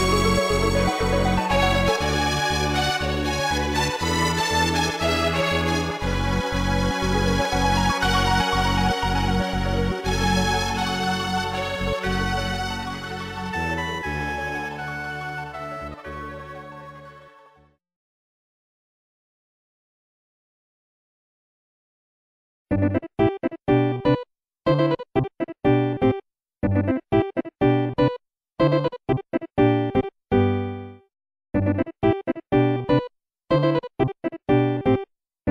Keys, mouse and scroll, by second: 3.1 click, 4.3 scroll up 2, 5.2 ctrl+s, 5.4 click, 5.9-6.3 typing, 6.7 click, 15.2 scroll down 1, 24.0 x, 27.9 scroll down 1, 28.6 ctrl+s, 29.4 scroll up 2, 33.1 typing, 34.2 click, 34.4 typing, 35.4 click.